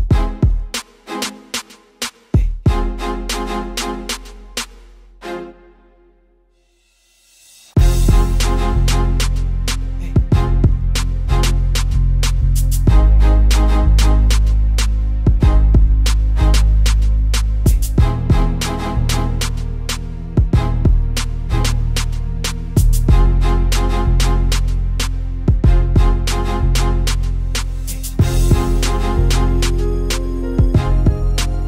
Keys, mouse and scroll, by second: 0.2 click, 0.8 x, 3.1 Tab, 3.6 Tab, 3.9 z, 4.7 z, 5.1 e, 7.8 p, 8.2 Tab, 8.6 click, 9.3-9.8 scroll up 4, 9.8-10.9 drag, 11.1 click, 12.5 click, 15.4-15.9 scroll down 4, 15.9 click, 16.4 click, 21.9 click, 22.2-22.8 scroll up 4, 24.2-24.5 scroll down 3, 26.4 click, 27.1 KP_1, 27.2-27.6 scroll down 1, 27.6 click, 27.9 g, 28.8 KP_7, 29.2 g, 30.7 click.